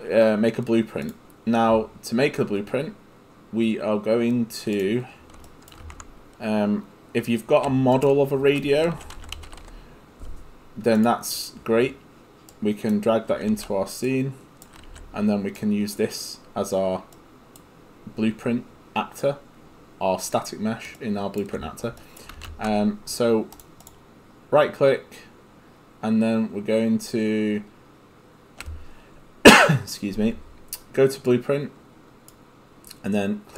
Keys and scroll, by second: 5.8 ctrl+space, 8.7-10.1 typing, 14.9 w, 22.4 ctrl+space.